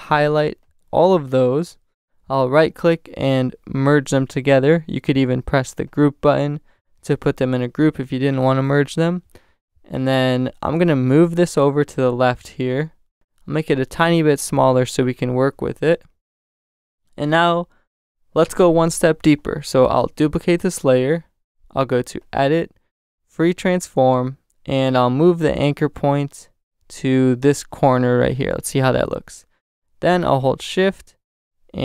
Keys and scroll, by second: 8.5 super+z, 13.1 super+t, 15.9 shift+Return, 16.9 Return, 20.5 super+j.